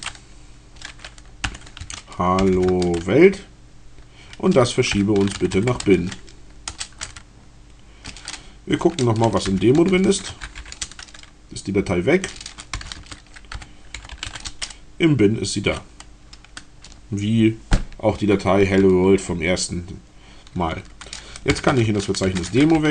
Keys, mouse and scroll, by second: 1.1 h, 1.8 a, 2.3 l, 2.7 Tab, 5.0-6.2 typing, 6.5 Return, 9.1-11.1 typing, 12.5-14.8 typing, 21.3-22.9 typing.